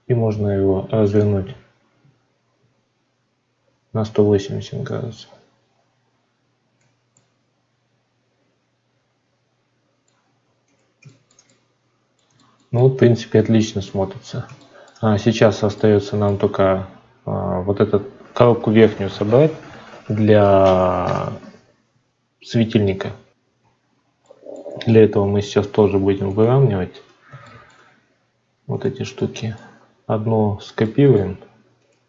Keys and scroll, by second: 23.5 F9, 25.1 ctrl+s.